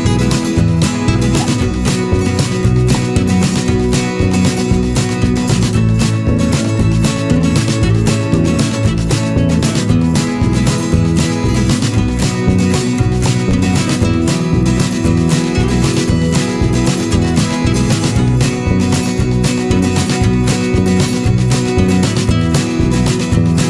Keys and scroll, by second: 0.7 ctrl+=, 5.6 ctrl+z, 10.8 Return.